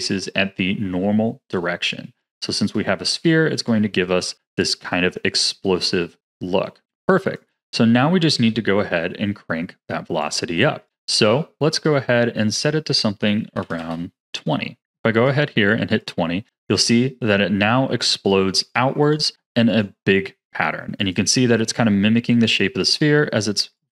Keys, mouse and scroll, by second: 5.9 middle click, 6.9-8.0 drag, 8.0-8.4 scroll down 4, 8.4-10.2 middle drag, 10.2-16.4 drag, 16.4-16.7 scroll down 6, 18.6-23.9 drag.